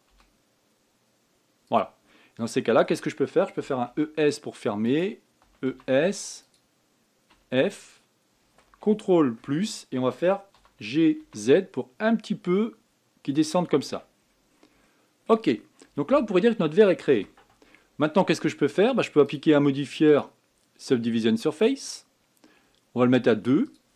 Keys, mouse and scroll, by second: 0.8 s, 2.8 middle click, 3.7-4.3 scroll up 1, 4.3 e, 6.2 e, 8.0 f, 10.2 ctrl+KP_Add, 11.3 g, 14.6 Tab, 14.9-15.3 scroll down 7, 15.6-16.3 middle drag, 16.3 scroll down 2, 17.9 KP_1, 20.0 click, 20.8-23.9 drag.